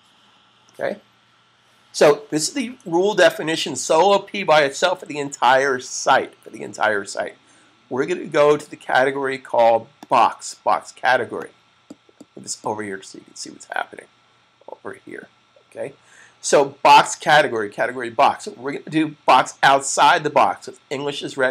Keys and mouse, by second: 9.9 click.